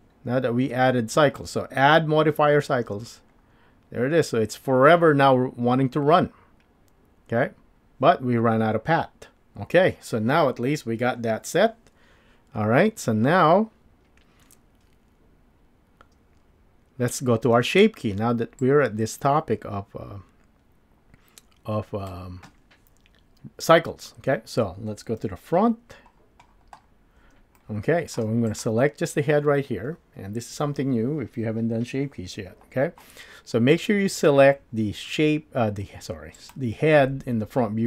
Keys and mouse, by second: 2.8 space, 17.6 space, 18.6-22.1 drag, 25.2 KP_1, 27.6-28.2 shift+drag, 28.5 click, 36.5 click.